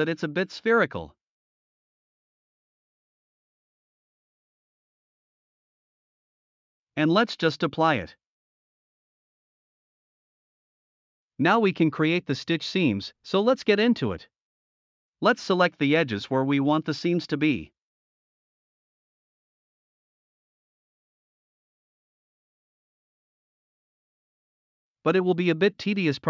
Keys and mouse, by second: 4.2 Tab, 4.5-5.0 middle drag, 5.5-6.4 middle drag, 6.8 middle click, 7.7-8.5 drag, 8.9 middle click, 9.0 Tab, 9.1 middle drag, 9.5 middle click, 9.6 Tab, 9.7 middle drag, 10.2 middle click, 10.6 middle drag, 11.6 middle click, 13.1 middle click, 13.5 Tab, 14.2-14.6 middle drag, 15.1-15.4 middle drag, 17.9 alt+click, 19.5 alt+shift+click, 20.1 alt+shift+drag, 22.2 alt+shift+click, 22.8-23.2 middle drag, 24.2-24.8 middle drag, 25.2-25.6 middle drag.